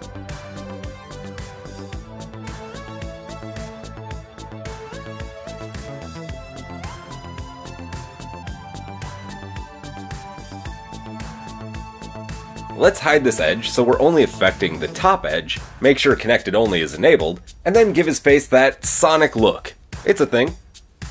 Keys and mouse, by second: 0.6 g, 7.5 click, 10.4-12.5 middle drag, 10.4 KP_1, 12.5 alt+click, 14.4-16.5 alt+middle drag, 15.2 h, 16.5-17.6 drag, 17.6-18.6 middle drag, 18.6 click, 18.9-20.3 shift+middle drag, 20.0 g.